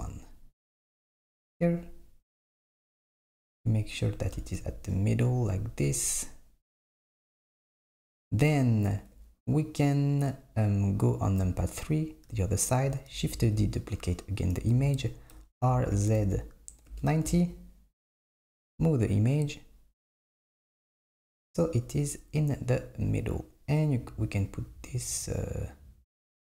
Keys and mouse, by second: 11.4 KP_3, 13.4 shift+d, 15.4 r, 18.4 click, 18.8 g.